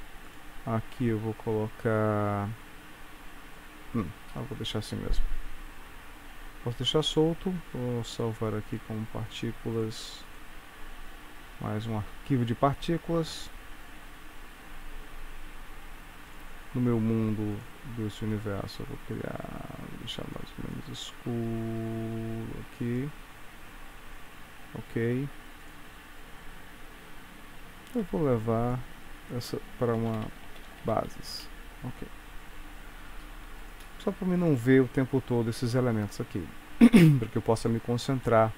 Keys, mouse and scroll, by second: 0.3 click, 6.6 ctrl+s, 17.0 click, 18.6 click, 25.7 click, 28.0 m, 33.7 click, 35.9 click.